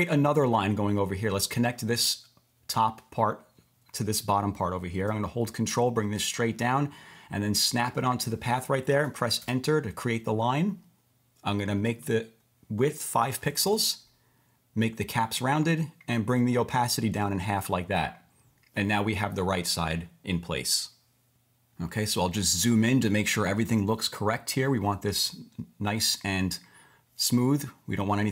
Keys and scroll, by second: 9.4 Return, 13.2 5, 13.7 Return.